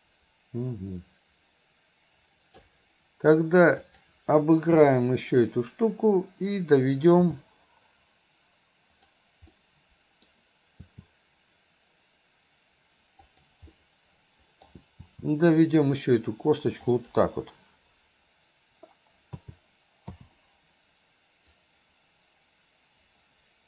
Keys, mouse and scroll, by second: 3.9 click, 7.3 r, 9.6 middle click, 10.8 r, 13.7 middle click, 15.1 r, 19.4 a, 20.2 i, 21.6-23.6 drag.